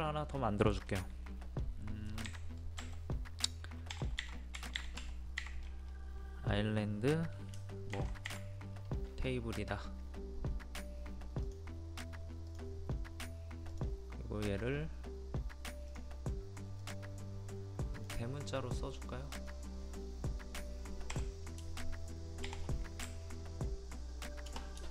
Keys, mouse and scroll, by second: 2.3 1, 11.4-20.4 drag, 21.1 Delete, 23.0 Right, 23.6 Right, 23.9 Right, 23.9 shift+i, 24.5 BackSpace.